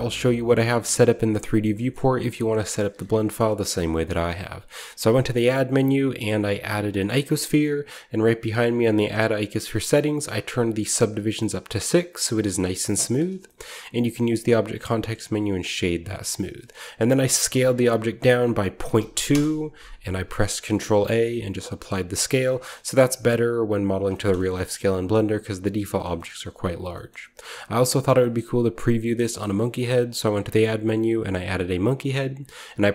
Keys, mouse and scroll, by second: 2.4-4.6 shift+middle drag, 2.4-3.5 scroll down 2, 3.5-4.1 shift+scroll down 1, 4.1-4.6 shift+scroll down 1, 4.7 shift+a, 7.0-10.4 drag, 10.4-12.9 drag, 13.1-14.9 drag, 13.4-14.1 middle drag, 13.5-14.9 scroll up 1, 14.0 w, 15.9-18.8 drag, 17.4 s, 18.8 ., 18.9 2, 19.2 Return, 20.2-20.9 typing, 20.4-22.3 ctrl+scroll up 1, 22.4-24.0 drag, 22.8 s, 24.2-29.8 shift+middle drag, 24.3-25.5 shift+scroll up 1, 25.5-26.7 scroll up 1, 26.7-27.9 shift+scroll down 1, 27.9-29.7 scroll down 1, 29.8 shift+a, 31.6-32.9 drag.